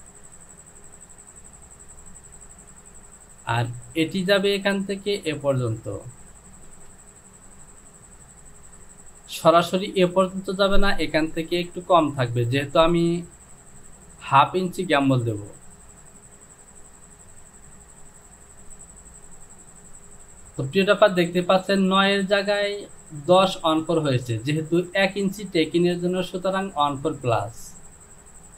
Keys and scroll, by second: 6.8 space.